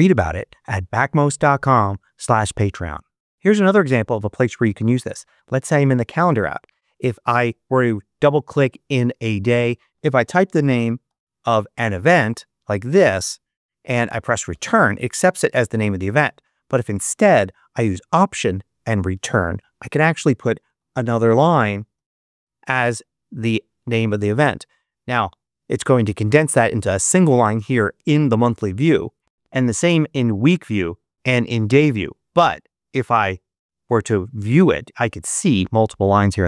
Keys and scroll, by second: 9.9-11.5 typing, 14.4 Return, 16.0 Right, 19.1 alt+Return, 20.3-22.5 typing.